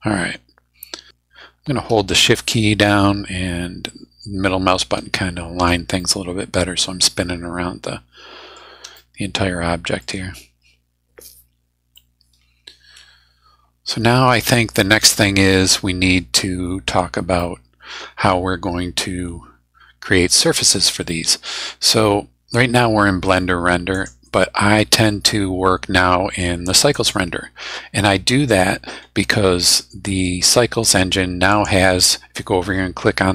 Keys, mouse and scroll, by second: 2.3-5.8 shift+middle drag, 6.0-8.7 shift+middle drag, 8.9-10.2 shift+middle drag, 11.9-16.3 drag, 17.4-20.4 drag, 21.0-22.1 middle drag, 23.9 click, 26.9 click, 31.5 click.